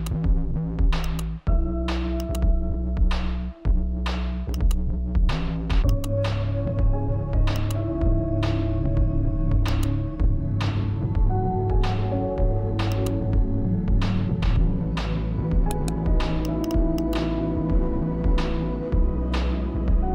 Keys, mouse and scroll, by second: 1.3 click, 5.7 click, 8.3 click, 10.3-16.7 drag, 16.7 right click, 17.4 click.